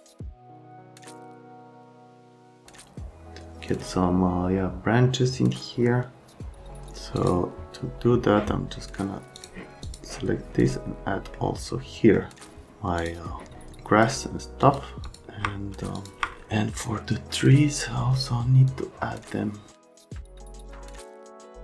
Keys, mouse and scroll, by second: 0.1 click, 7.1 click, 9.3 click, 9.8 click, 11.3 middle click, 13.0 click, 14.6 click, 15.0 click, 16.0 click, 16.8 middle click, 18.7 shift+click, 20.0 click, 20.2 click, 20.4 c, 20.8 F3, 21.1 click, 21.2 right click, 21.5 click.